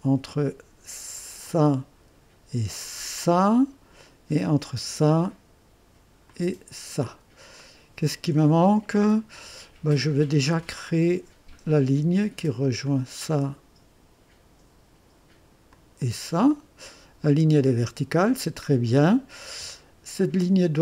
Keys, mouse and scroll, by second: 1.4 click, 3.0 click, 4.6 click, 6.2 click, 7.5 right click, 10.8 click, 12.8 click, 15.7 click, 16.5 right click, 18.8-19.1 scroll down 2, 19.4-20.3 right drag.